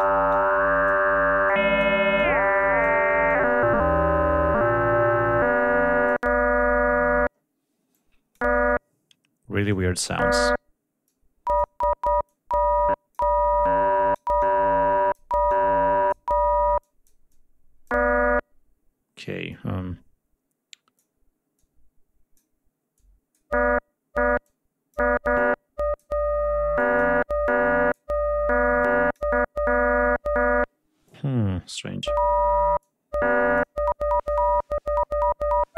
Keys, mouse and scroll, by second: 0.3-1.0 drag, 1.4 click, 2.1-3.0 drag, 3.3-6.3 drag, 7.9 click, 9.7 click, 11.0 click, 12.2 click, 13.6 click, 14.4 click, 15.5 click, 16.8 click, 17.3 click, 19.5-21.2 drag, 21.5 click, 22.9 click, 24.4 click, 25.3-26.2 drag, 26.8 click, 27.4 click, 28.8 click, 31.0 click, 32.8 click.